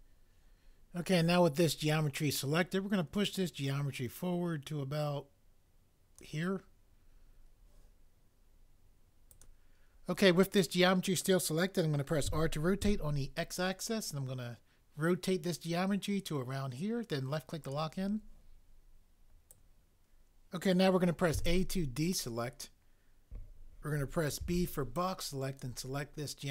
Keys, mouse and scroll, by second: 12.3 r, 12.8 x, 21.3 a, 24.4 b.